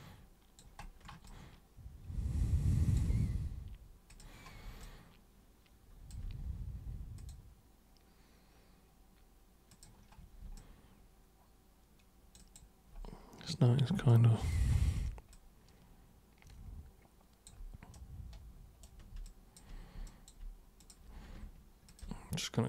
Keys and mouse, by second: 1.3-2.9 alt+super+drag, 4.1 super+click, 4.8-6.1 alt+super+drag, 7.2 super+click, 9.7 super+click, 10.5-12.4 alt+super+drag, 14.1-14.5 alt+super+drag, 15.3-17.5 alt+super+drag, 17.9 super+right click, 19.2 alt+super+click, 20.0 alt+super+click, 20.8 super+click, 21.9 ctrl+shift+super+click.